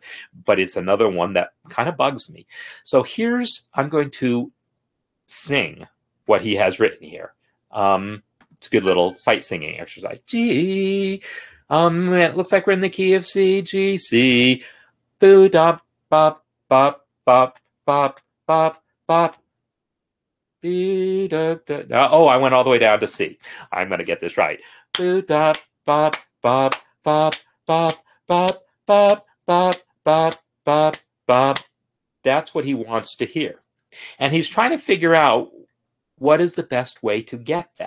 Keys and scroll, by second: 0.0 ctrl+\.